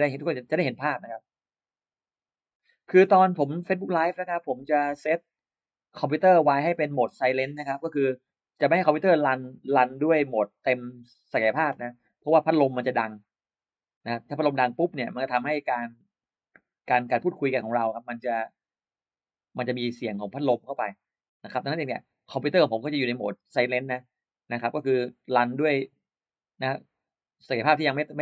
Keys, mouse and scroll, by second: 12.4-28.2 drag.